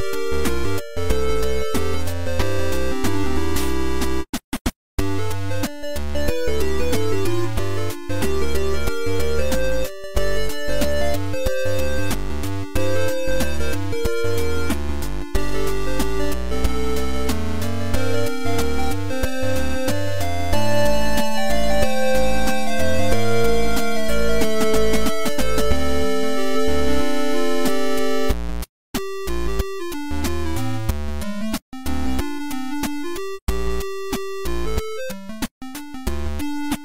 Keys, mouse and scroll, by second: 0.3 r, 0.5 z, 3.7 shift+r, 4.3 shift+r, 4.8-5.1 shift+r, 7.7 click, 9.3 shift+middle click, 10.5 click, 10.5 right click, 11.3 click, 13.6-15.2 drag.